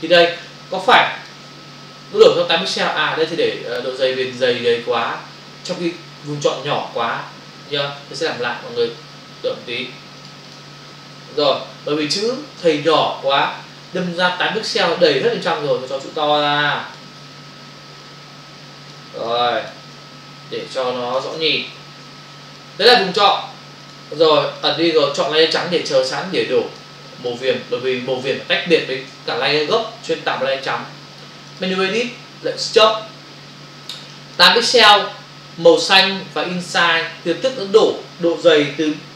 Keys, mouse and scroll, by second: 0.5 ctrl+click, 4.2 ctrl+alt+z, 10.2 click, 10.5 double click, 15.6 shift+click, 18.0 click, 19.3 click, 20.7 shift+click, 21.6 Return, 22.6 click, 23.8 ctrl+click, 24.6 click, 24.7 double click, 25.2 click, 26.1 ctrl+click, 27.3 click, 31.6 click, 32.6 click, 34.1 click.